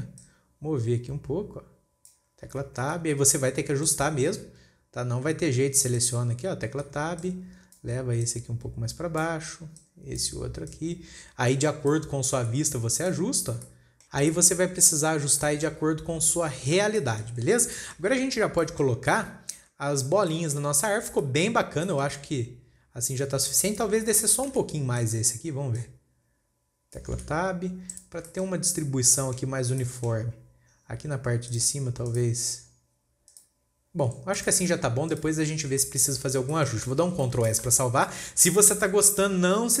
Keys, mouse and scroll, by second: 0.6 click, 2.7-3.4 scroll down 1, 3.4 Tab, 4.0 scroll down 1, 4.3 click, 4.8 scroll up 2, 6.4 click, 7.3 Tab, 7.7 click, 8.7 click, 10.2 click, 11.1 click, 12.7 scroll down 2, 12.9 Tab, 13.4 click, 13.9 scroll up 2, 14.1-16.2 shift+middle drag, 16.2-17.5 scroll up 2, 17.5-18.0 shift+middle drag, 18.0 scroll down 2, 18.2-18.7 shift+middle drag, 18.7-19.0 scroll up 2, 19.0-19.7 shift+middle drag, 19.7-20.3 scroll down 3, 20.3-20.8 scroll up 2, 20.8-21.4 shift+middle drag, 21.4-21.7 scroll up 1, 21.7-22.7 shift+middle drag, 22.7-23.9 scroll up 2, 23.9 scroll up 1, 24.1 click, 24.6 scroll down 1, 25.1 Tab, 25.5 click, 26.2 click, 27.7 Tab, 28.0 scroll down 3, 28.4 click, 28.8-30.7 shift+middle drag, 30.7 scroll up 2, 31.4 scroll up 2, 32.5 click, 33.7 click, 34.6 scroll down 2, 34.9 click, 35.1 scroll down 5, 35.6 click, 36.0 scroll up 2, 36.3-36.7 shift+middle drag, 36.7 scroll down 1, 36.9-37.3 shift+middle drag, 37.3 scroll up 1, 38.1 ctrl+s, 38.5-39.8 shift+middle drag.